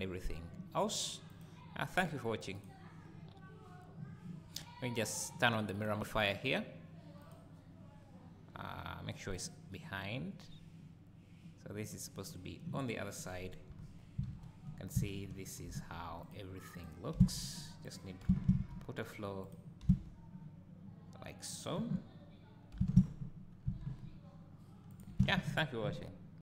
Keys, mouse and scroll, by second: 1.3 click, 2.5 click, 5.0 click, 5.7-11.9 drag, 12.3 click, 12.9-13.7 scroll down 1, 13.7 KP_0, 14.3 alt+a, 15.3 shift+a, 17.2 s, 18.0 click, 18.2 g, 19.5 click, 19.9 s, 21.6 click, 22.8 g, 25.0 click, 25.2 alt+a.